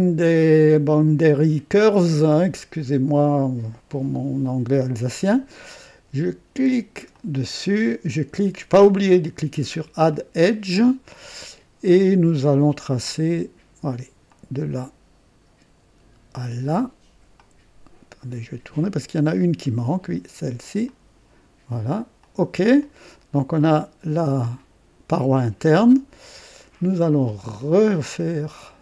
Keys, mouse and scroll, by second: 7.1 click, 10.1 click, 14.2 click, 16.3 click, 17.4-19.9 drag, 20.8 click, 22.2 click, 22.8-24.3 drag, 24.4-26.7 drag, 25.9 right click, 28.1 click.